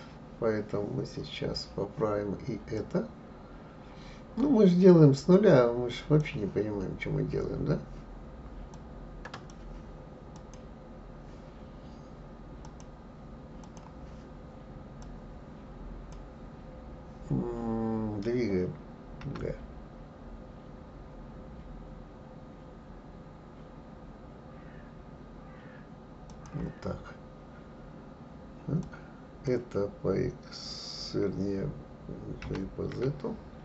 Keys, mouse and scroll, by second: 2.7-5.7 drag, 8.7-10.5 drag, 12.6-15.1 drag, 19.2 g, 28.8 click, 32.4 g.